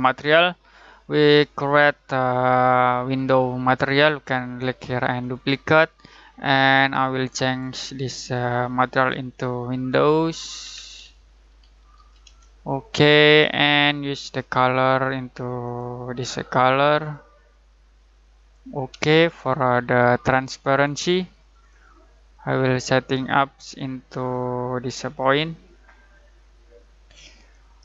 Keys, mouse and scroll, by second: 3.1 right click, 5.2 click, 9.9-12.7 typing, 13.4 click, 17.0-18.3 drag, 20.6 click, 21.5 click, 24.3-27.8 drag.